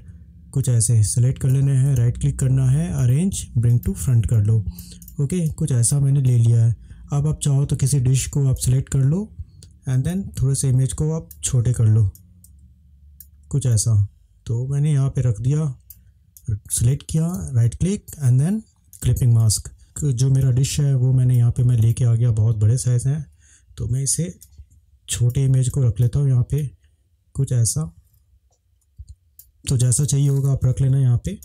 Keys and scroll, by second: 20.4 space, 30.0 space, 30.6 ctrl+=, 31.3 ctrl+space.